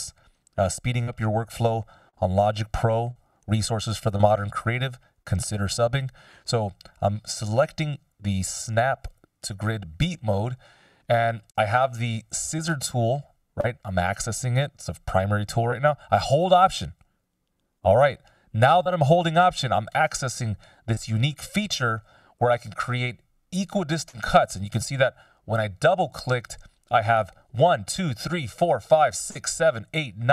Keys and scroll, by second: 7.6 F17, 8.2 =.